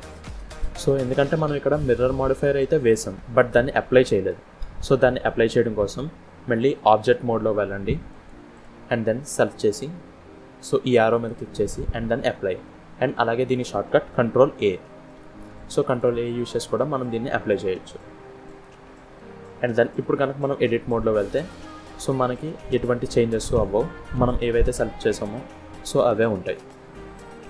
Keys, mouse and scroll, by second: 0.9 middle click, 3.8 middle click, 4.4 Tab, 5.1 middle click, 5.9-6.3 scroll up 1, 8.0 click, 8.4 click, 9.1 click, 11.0 click, 13.4 click, 14.4 ctrl+a, 15.7 click, 19.9 middle click, 20.4 Tab, 21.8 click, 22.6 middle click, 27.0 middle click.